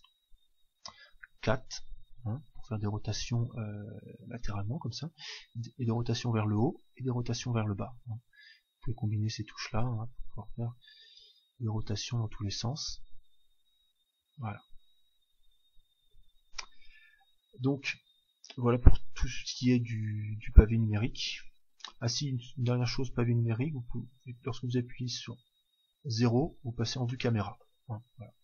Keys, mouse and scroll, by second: 0.8-3.8 KP_4, 5.2-16.1 typing, 24.4 KP_0, 25.3 KP_0, 27.0-28.4 middle drag.